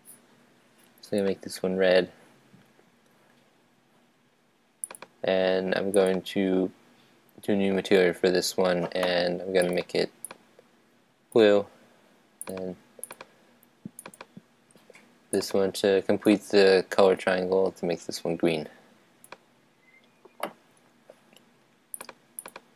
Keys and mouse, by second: 4.8-7.8 drag, 9.7-11.5 drag, 12.4-19.1 drag, 21.9 click.